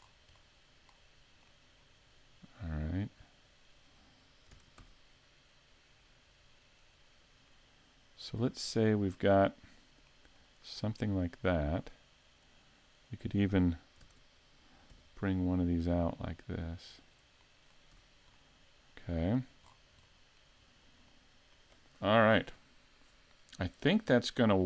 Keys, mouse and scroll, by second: 0.1 scroll down 2, 0.5 middle click, 1.8-3.0 scroll up 1, 3.0 right click, 3.0 scroll up 1, 4.5 shift+d, 7.0 click, 8.4-8.9 scroll down 2, 8.8 middle click, 10.5 shift+middle click, 10.9-11.4 scroll up 1, 11.4 middle click, 13.0 right click, 14.0 shift+d, 17.4 middle click, 18.0 a, 18.4 middle click, 19.7-20.1 scroll down 3, 20.1 shift+middle click, 20.6 scroll up 2, 21.1 shift+middle click.